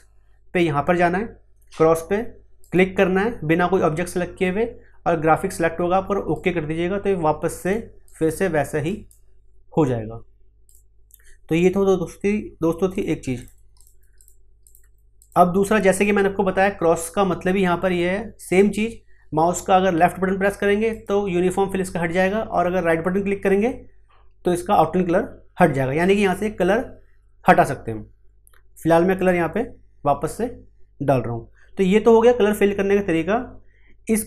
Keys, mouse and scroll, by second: 2.6 click, 6.3 click, 10.4 click, 20.9 click, 23.4 right click, 29.1 click, 33.9-34.2 scroll down 1.